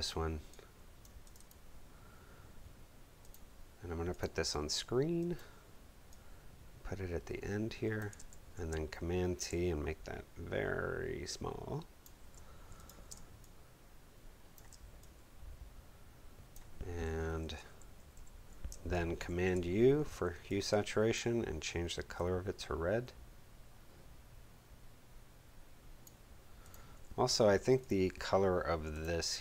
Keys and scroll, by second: 8.2 super+t, 13.0 alt+shift+space, 13.5 space, 17.2 Left, 17.9 Up, 18.6 super+Up, 19.2 super+u.